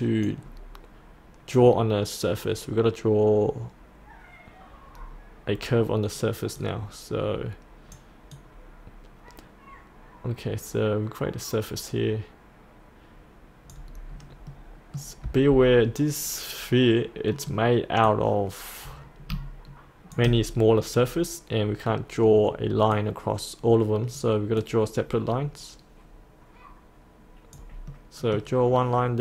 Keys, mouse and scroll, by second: 0.0 click, 5.8-6.6 scroll up 1, 6.6-13.8 drag, 14.1-14.5 scroll down 1, 14.5-14.9 scroll up 1, 17.3 middle click, 18.1-20.2 drag, 21.0-22.9 scroll up 1, 22.9-27.9 drag, 27.9-29.1 middle drag.